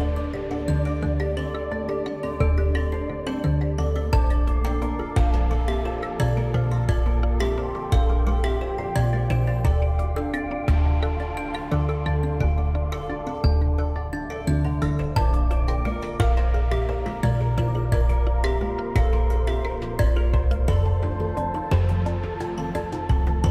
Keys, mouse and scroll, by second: 13.7-23.5 middle drag.